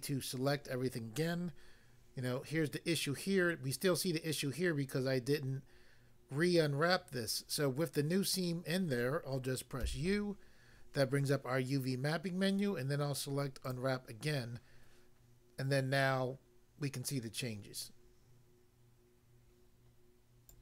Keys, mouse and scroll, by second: 9.8 u, 13.6 click, 20.4 click.